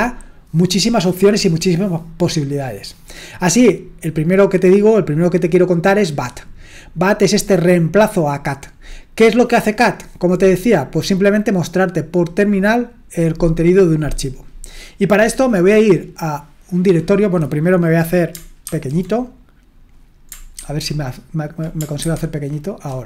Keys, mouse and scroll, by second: 16.8-18.6 drag, 18.6 ctrl+2, 20.5 shift+1, 22.0 ctrl+1, 22.0 ctrl+2.